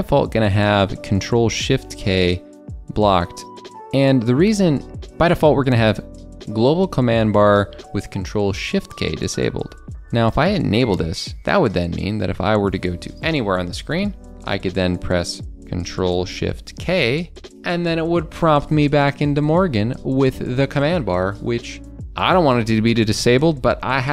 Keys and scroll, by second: 12.8 super+d, 16.9 super+d.